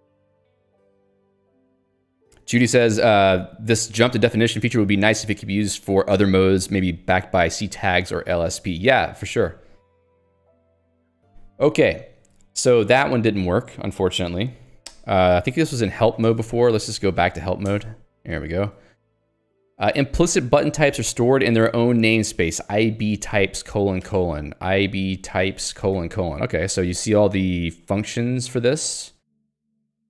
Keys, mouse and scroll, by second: 15.0 alt+x, 15.6-18.8 typing, 21.6 k, 22.7 l, 24.7-26.6 typing, 28.7 ctrl+j.